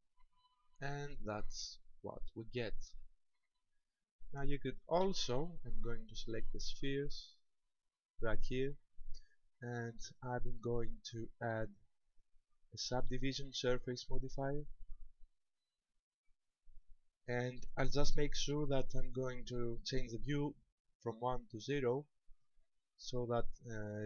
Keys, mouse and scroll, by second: 5.0 Escape, 6.0-6.6 scroll up 3, 7.6 right click, 10.0 click, 11.3 click, 13.0 click, 16.8 click, 21.7 click.